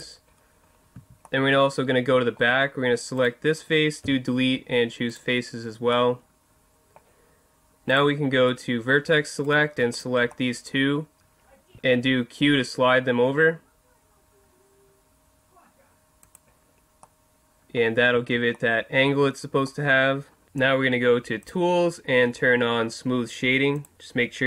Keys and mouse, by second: 0.4 middle click, 0.9 z, 1.7 middle click, 3.2 right click, 4.0 Delete, 7.9-9.8 drag, 9.4 right click, 10.4 click, 10.5 right click, 11.7 q, 16.3 click, 17.0-18.3 middle drag, 18.1 Tab, 21.4-23.2 drag, 23.7-24.4 drag.